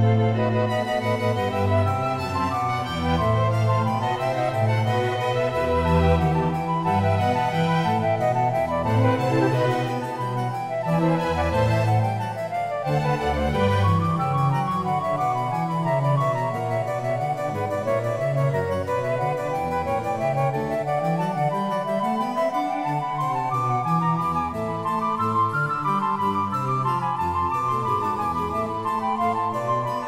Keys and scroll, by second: 0.7 g, 9.6 g, 12.7 s, 20.9 g, 25.3 s, 29.0 Tab.